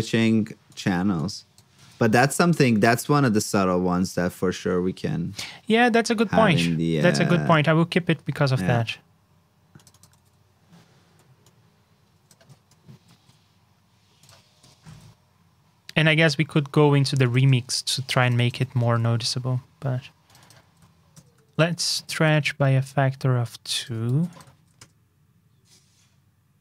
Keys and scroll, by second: 2.8 super+Tab, 7.3 super+c, 7.4 super+Tab, 10.1 super+v, 12.9 alt+shift+Down, 14.9 super+Tab, 18.5 super+c, 18.7 super+Tab, 20.6 super+v, 21.4 super+Tab, 24.0 super+c, 24.5 super+v.